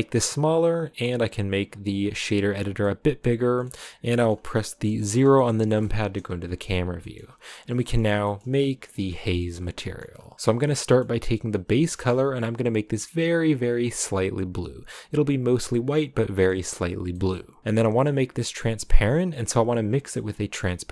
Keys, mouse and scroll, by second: 2.2 click, 3.1-5.7 middle drag, 5.7 KP_0, 6.8 scroll down 1, 7.0-8.0 shift+middle drag, 8.0 scroll up 3, 8.4 a, 13.3 click.